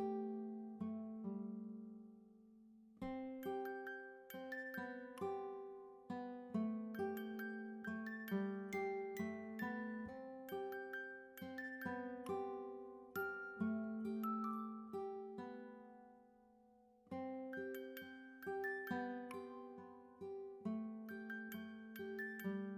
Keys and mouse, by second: 0.0 click, 0.2 double click, 0.3 click, 2.1 click, 6.7 click, 8.4 ctrl+d, 9.8 click, 10.6 click, 11.0 ctrl+a, 11.6-17.7 typing, 19.8-22.7 typing.